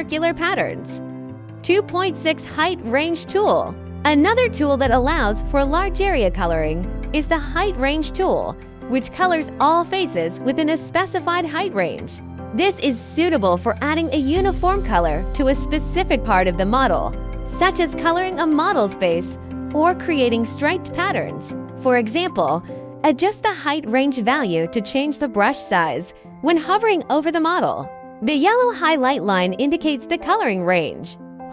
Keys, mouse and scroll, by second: 0.2 click, 1.9 click, 12.4 click, 23.3 click, 24.9 click, 28.9 click.